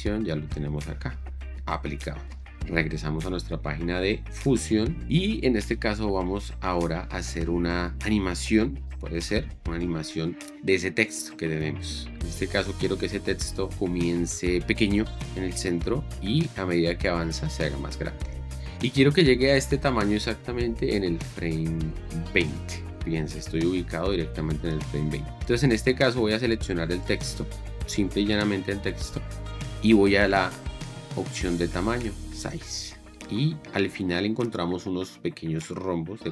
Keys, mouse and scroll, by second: 2.7 shift+5, 26.8 click.